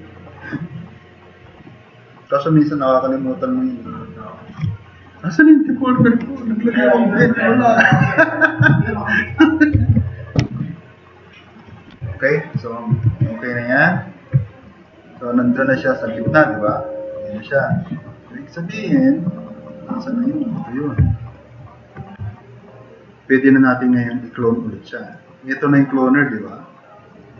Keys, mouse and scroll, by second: 10.0 super+-, 11.1 drag, 11.8-12.2 drag, 13.1 alt+q, 14.6 click, 14.9-15.3 drag, 15.8 drag, 21.1 click, 22.3-22.7 drag, 23.5 drag.